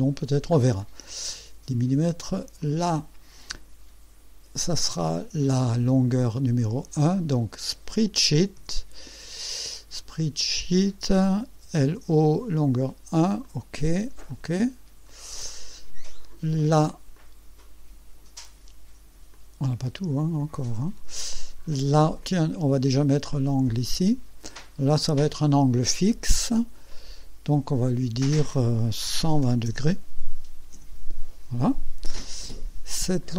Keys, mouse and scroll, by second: 0.2 scroll down 2, 0.8-1.5 right drag, 2.6 click, 4.7 click, 7.2 click, 8.6 s, 9.9 click, 11.3-12.3 typing, 12.7 click, 13.4 click, 14.3 click, 15.0 scroll down 1, 15.5 right click, 17.1-18.5 drag, 19.3-21.3 drag, 22.2 click, 23.7 click, 26.9 click, 29.2 KP_1, 29.4 KP_2, 29.7 KP_0, 30.8 KP_Enter, 33.2 click.